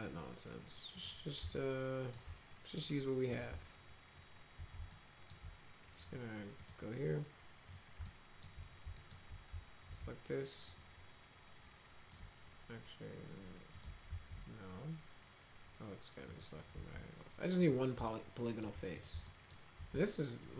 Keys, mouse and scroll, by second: 1.0 click, 1.5 alt+middle click, 3.3 click, 4.9 alt+middle click, 6.6 click, 7.7 click, 8.1 alt+middle click, 9.0 alt+middle click, 10.8-12.1 shift+drag, 13.8 click, 14.1 ctrl+z, 16.3 click, 17.6 click, 18.1-18.7 alt+middle drag, 19.0 click, 19.3 alt+middle click, 20.4-20.5 shift+drag.